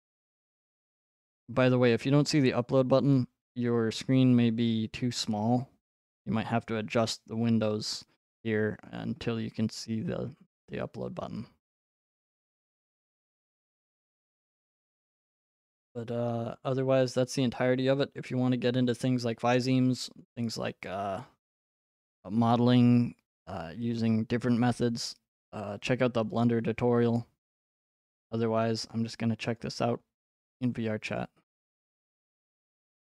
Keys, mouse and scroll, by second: 28.3 click, 29.6 click, 32.8 click.